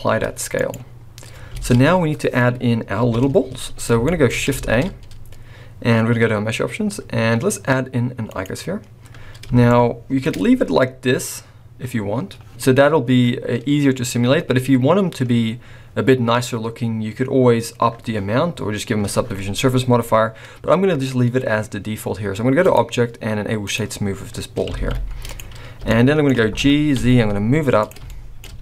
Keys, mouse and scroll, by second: 1.7 alt+a, 2.9 KP_1, 3.7 scroll down 4, 4.0 shift+middle click, 4.2 scroll up 4, 4.6 shift+a, 9.6 shift+middle click, 10.3-12.3 scroll up 6, 12.5 click, 14.0-14.4 scroll down 2, 15.2-15.7 scroll down 3, 16.4-18.3 scroll up 2, 20.7-21.7 scroll up 1, 22.6 click, 24.2-24.8 scroll down 4, 24.8 alt+a, 25.2 click, 25.9 shift+middle click, 26.5 g, 28.1 shift+middle click, 28.4-28.6 scroll up 2.